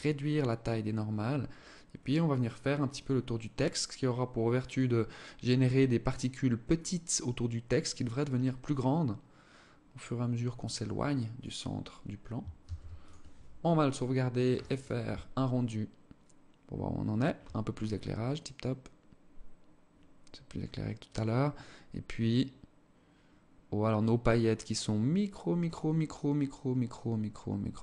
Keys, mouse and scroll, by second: 7.7 click, 12.1 ctrl+s.